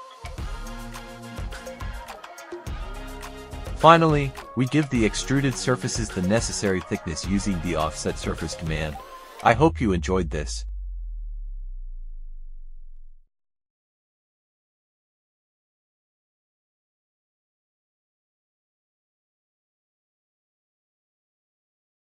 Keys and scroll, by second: 1.2 Delete, 5.1-6.6 typing, 8.5 space, 15.8 ctrl+alt+r.